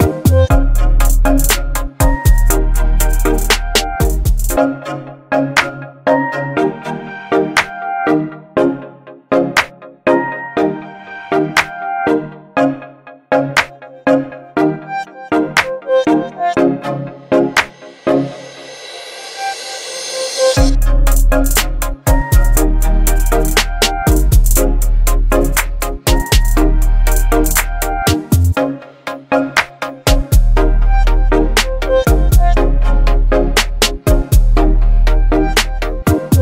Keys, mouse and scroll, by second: 3.1 x, 3.8-5.6 drag, 13.5 v, 14.0 ctrl+0, 15.9 ctrl+click, 17.0 ctrl+g, 18.9 click, 21.1-23.3 typing, 26.1 BackSpace, 26.1 e, 26.3 Return, 28.1 right click, 29.2 click, 30.7 v, 30.9 ctrl+t, 32.9-34.1 drag.